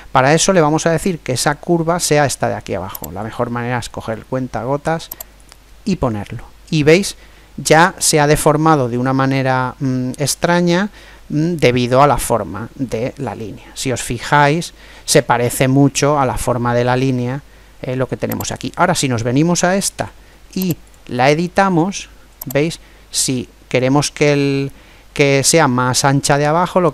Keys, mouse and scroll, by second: 2.9 click, 8.6-10.4 middle drag, 18.3 right click, 19.7 Tab, 22.4 click.